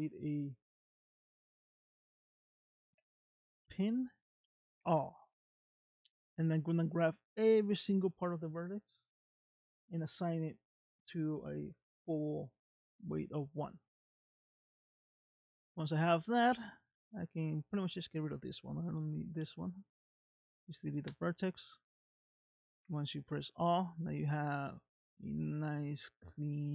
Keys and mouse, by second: 0.8 click, 0.9-10.2 drag, 4.9 l, 10.3 click, 10.6 click, 13.0 click, 14.0 middle click, 16.8 click, 19.0 x, 22.0 middle click, 22.8 a, 23.4-25.3 middle drag, 26.4 middle click.